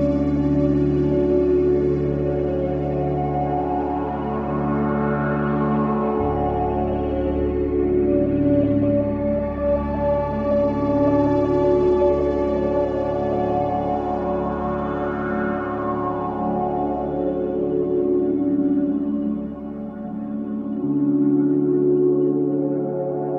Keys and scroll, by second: 5.2 v, 5.7 space, 7.2 ctrl+KP_0, 9.2 ctrl+KP_0, 10.0 s, 12.2-15.4 typing, 16.2 Return, 17.0 Return, 19.2 p.